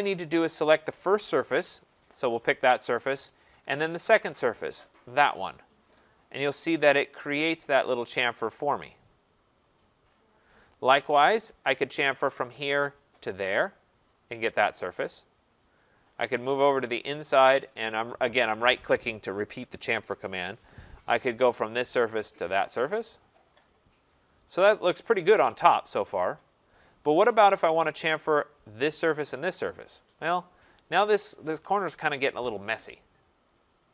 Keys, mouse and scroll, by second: 1.8-6.0 drag, 6.0-7.8 middle drag, 6.0-6.7 scroll, 6.7 scroll, 10.1 right click, 10.5 middle click, 11.5 right click, 12.5 click, 13.3 click, 16.4 right click, 17.4 right click, 21.6 click, 22.3 click, 23.1 scroll, 24.7 right click, 25.3 middle click, 25.4 middle click, 26.6 middle click, 26.6 middle click, 26.7 scroll, 27.3 scroll, 28.4 right click, 28.8 click, 29.4 click, 30.1-31.3 scroll, 33.3 scroll.